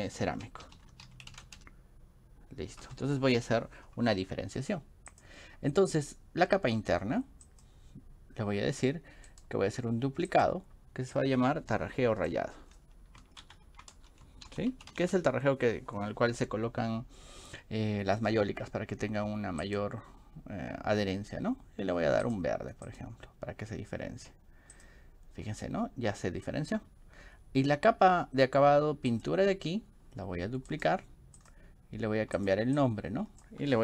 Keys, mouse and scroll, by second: 0.0-2.1 typing, 2.8 Return, 5.1 click, 7.5 click, 9.3 click, 13.4 shift+Right, 14.0-15.4 typing, 29.1 click, 30.7 middle click, 31.4 click, 32.4 click, 32.8 click.